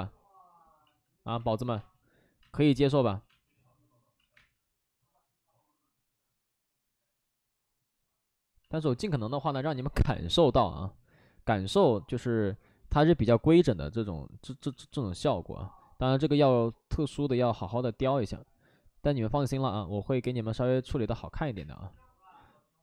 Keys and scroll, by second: 0.8 ctrl+z, 1.7-3.0 typing, 4.1 ctrl+z, 4.3 space, 8.9 alt+s, 10.2 alt+s, 10.3 alt+s, 14.6 ctrl+z, 20.6 alt+s, 21.5 space.